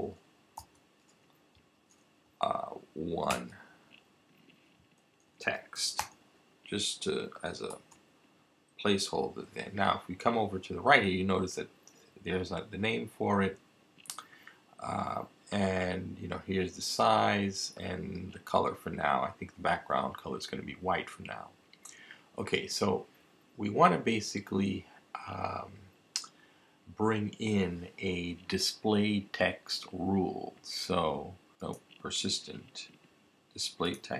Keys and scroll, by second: 0.0-0.3 typing, 2.2 typing, 3.3 1, 5.0-6.5 typing, 7.7 Return.